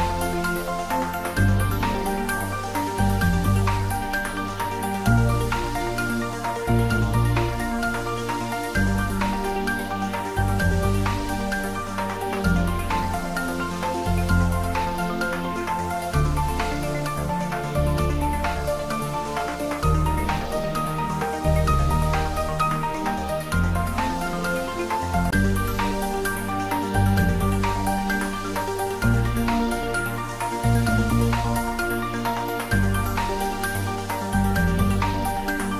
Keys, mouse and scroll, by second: 3.6-5.3 typing, 5.9 click, 6.7 middle click, 7.7 ctrl+z, 9.0 shift+f, 9.4 r, 10.5 click, 11.3 ctrl+z, 12.2 click, 13.2-15.8 typing, 16.2 click, 18.5-19.7 scroll down 1, 19.7 g, 21.0 y, 24.1 click, 24.4 scroll up 1, 25.7 `, 26.1 3, 27.1 scroll down 1, 29.8 g, 30.1 y, 31.0 Up, 31.7 click.